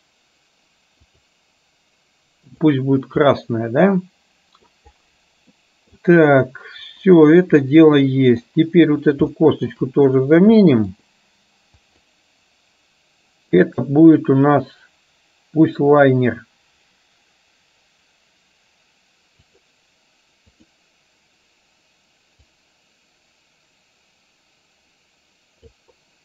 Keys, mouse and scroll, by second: 2.7 click, 3.3-4.7 middle drag, 5.7 middle click, 7.8-8.4 middle drag, 9.4 shift+middle click, 10.7-11.1 middle drag, 11.9 click, 13.7-19.8 drag, 20.7 click, 22.6-25.9 drag.